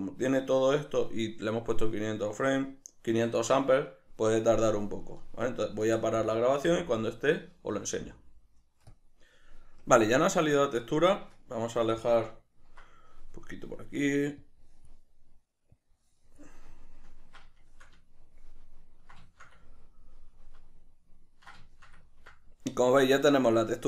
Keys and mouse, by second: 11.7-14.8 middle drag, 14.8 drag, 16.2-17.2 drag, 17.2-23.8 ctrl+middle drag.